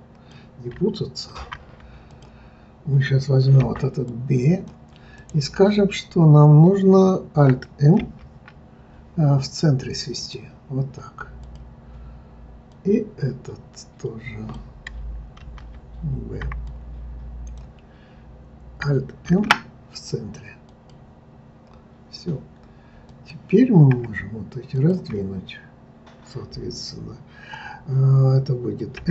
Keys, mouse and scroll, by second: 1.3 ctrl+z, 2.1 click, 3.6 b, 5.1-8.0 right drag, 8.0 alt+m, 11.4 click, 12.7 click, 15.4 ctrl+z, 16.4 b, 19.3 alt+m, 23.0 click, 24.7 shift+click, 25.4-27.6 scroll down 2, 29.0 s.